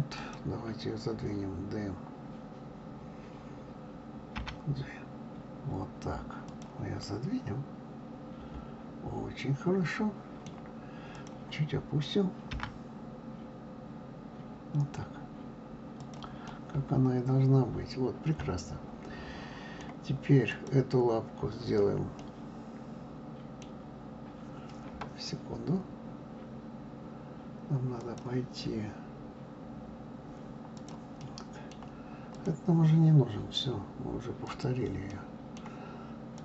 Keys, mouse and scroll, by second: 4.4 g, 7.0-10.0 middle drag, 11.1 click, 12.5 g, 16.5-19.5 middle drag, 20.4 click, 22.2-25.2 middle drag, 28.0-30.9 drag, 31.2-32.3 middle drag, 32.3 click, 34.4 click, 35.1-36.3 middle drag, 36.3 click.